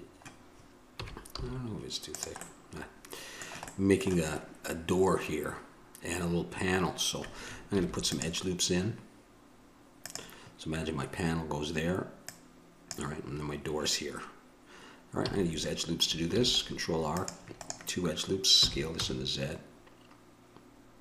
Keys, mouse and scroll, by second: 2.7-8.0 drag, 8.0 ctrl+r, 13.1-15.5 drag, 15.5 a, 16.5 ctrl+r, 18.8 s.